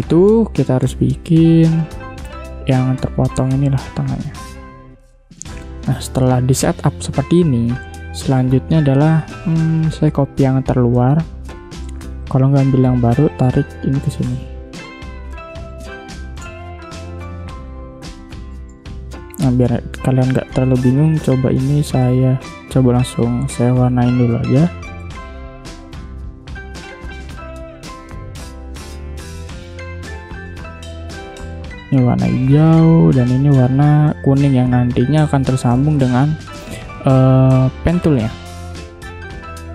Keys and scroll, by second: 4.1 space, 9.8 space, 11.2 space, 15.8 space, 17.7 v, 18.6 space, 22.0 shift+x, 22.6 space, 25.4 v, 28.3 v, 29.5 ctrl+z, 32.2 v, 35.3 v, 39.0 space.